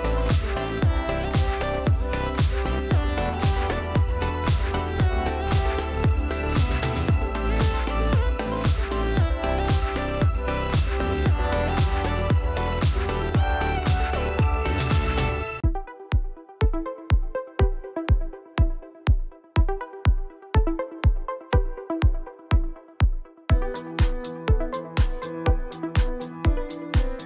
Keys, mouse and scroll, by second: 0.2 click, 4.5 ctrl+shift+k, 6.8 click, 8.9 click, 11.3 click, 12.3 click, 14.4 click, 15.4 shift+click, 16.2 shift+click, 17.0 shift+click, 18.4 click, 19.3 click, 20.4 click, 22.1 Delete, 23.0 click, 24.6 click, 25.0 click, 25.6 click.